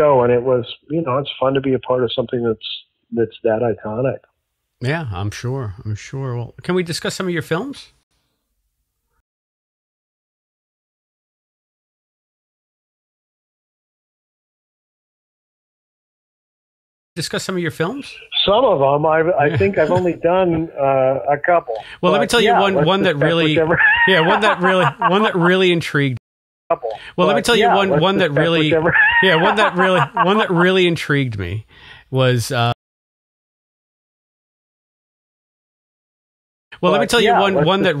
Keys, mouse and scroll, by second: 0.8-2.3 drag, 3.7 click, 6.4-7.8 drag, 7.9 Delete, 9.1 space, 9.6 click, 11.4 click, 12.2 click, 13.0 click, 13.9 Delete, 14.1 click, 15.2-16.5 drag, 17.0 click, 17.0 space, 19.0 click, 19.8 click, 20.9 click, 21.4 click, 22.4-25.0 drag, 25.3 click, 26.1 space, 26.5 click, 26.6 space, 27.7-33.5 drag, 32.6 space, 33.9 click, 34.6 click, 35.6-38.0 drag, 36.6 space.